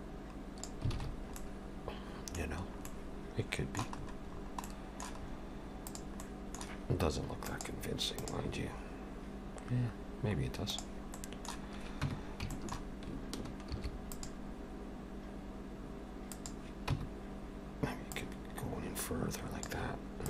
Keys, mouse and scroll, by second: 1.0 alt+a, 1.1 scroll down 4, 1.4 middle click, 2.5-2.9 scroll down 2, 2.8 middle click, 4.0-4.7 scroll up 7, 4.7 middle click, 5.2-5.7 scroll up 1, 5.8 click, 6.2 middle click, 11.2 middle click, 12.1 Tab, 12.5 shift+middle click, 13.7 ctrl+r, 16.9 Tab, 18.1 click.